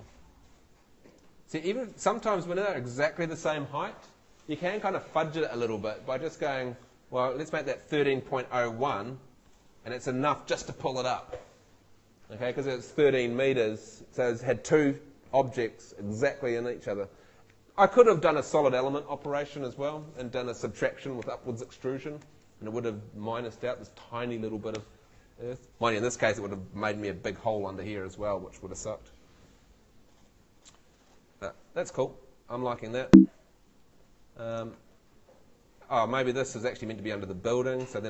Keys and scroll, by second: 7.5 |, 32.9 Escape.